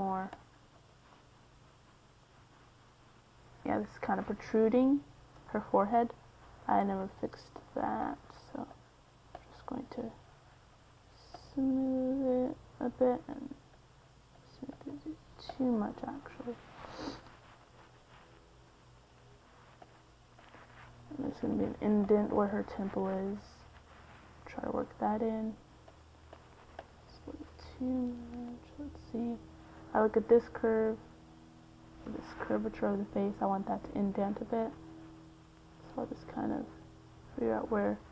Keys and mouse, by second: 1.6-3.5 middle drag, 4.1 f, 5.7-9.0 drag, 9.0 middle click, 9.5-11.0 drag, 16.7 middle click, 18.5-23.3 drag, 23.3 middle click, 24.6-27.1 drag, 34.6-38.1 drag.